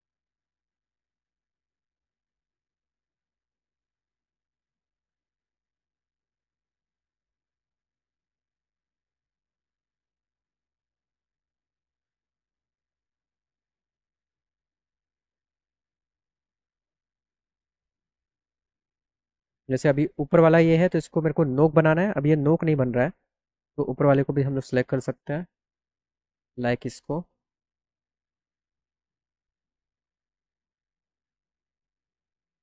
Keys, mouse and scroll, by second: 0.3 click, 1.0 click, 1.7 click, 2.5 click, 3.4 click, 3.9 click, 4.7 click, 5.2 click, 6.2 click, 6.4 click, 6.6 click, 7.2 click, 7.7 click, 8.5 click, 8.8 click, 9.5 click, 9.8 click, 11.4 click, 11.9-13.1 drag, 15.3 click, 20.3 click, 25.5 click, 27.5 ctrl+click, 29.7 ctrl+click, 30.5 click, 31.6 click, 32.2 ctrl+click.